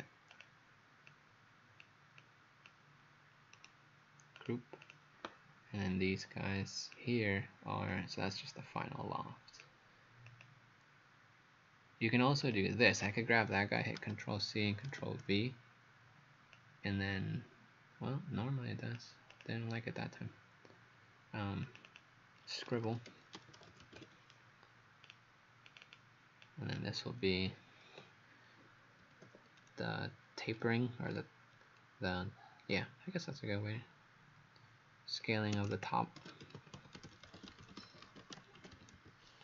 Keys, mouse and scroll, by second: 0.3 click, 3.6 right click, 4.4 click, 4.8 click, 5.8 click, 14.0 ctrl+c, 14.9 ctrl+v, 16.6 click, 21.9 click, 22.5-24.4 typing, 25.1 click, 25.7 click, 26.5 click, 29.1 t, 35.6-39.4 typing.